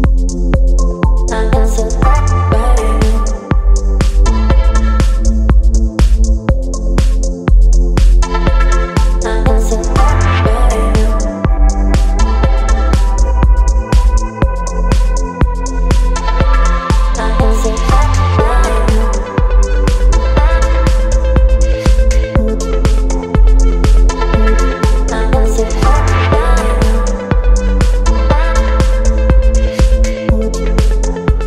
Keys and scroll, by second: 12.1 ctrl+t, 23.2 Right, 23.4 Right, 23.4 Right, 23.9 Up, 24.0 Up, 24.1 Up, 24.7 Return, 24.7 ], 26.3 ctrl+j, 27.2 ctrl+t.